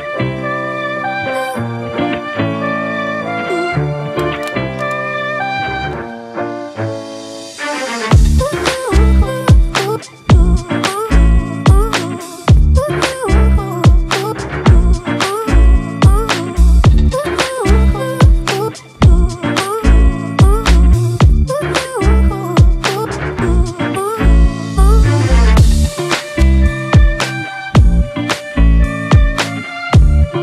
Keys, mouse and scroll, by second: 17.0 alt+click, 18.3 alt+scroll down 2, 19.8-20.3 alt+scroll up 1, 22.0 ctrl+t, 27.6 Return, 28.5 Up, 29.7 Down.